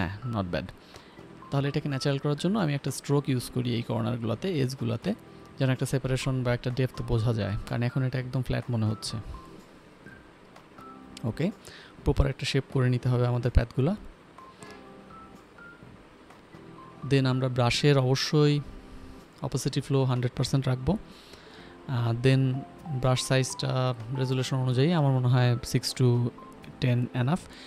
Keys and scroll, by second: 1.3 ctrl+l, 2.2 Escape, 18.2 Up, 18.4 Up, 18.4 Right, 18.5 Up, 18.5 Right, 21.0 Up, 21.2 Up, 21.3 Up, 21.7 Up, 22.8 shift+n, 23.3 i, 24.2 x, 25.5 b.